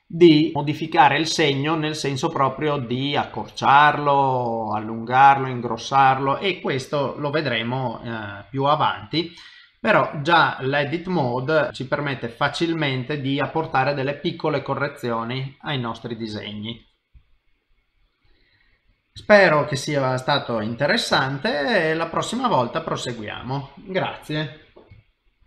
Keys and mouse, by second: 8.2 middle click, 11.1 middle click, 14.7 middle click, 15.5 middle click, 16.3 middle click, 18.7 middle click, 19.3 shift+middle click, 19.6 shift+middle click, 19.6 middle click, 21.2 shift+middle click, 21.6 middle click, 22.2 shift+middle click, 22.6 middle click.